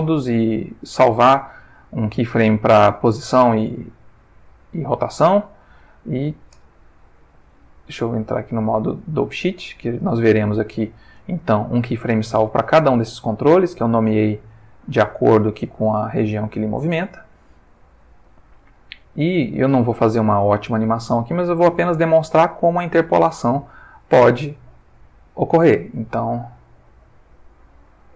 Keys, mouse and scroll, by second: 4.9 click, 7.6 click, 9.1 click, 9.9 middle click, 12.4 middle click, 13.3 middle click, 14.3 middle click, 15.2 middle click, 16.4 middle click, 17.5 middle click, 18.5 middle click, 19.3 middle click, 20.0-21.1 middle drag, 21.6-23.7 drag, 25.9 click, 26.6 g.